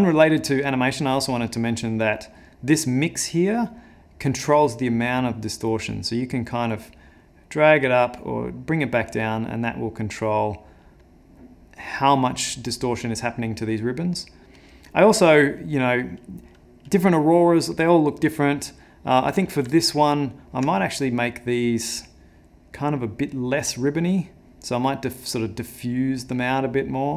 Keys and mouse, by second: 1.1 click, 1.9 middle click, 4.6 click, 13.8 middle click, 14.6 middle click, 15.6 click, 16.5 click, 19.8 ctrl+middle click, 21.4 click, 22.7 click, 24.6 click, 26.3 click.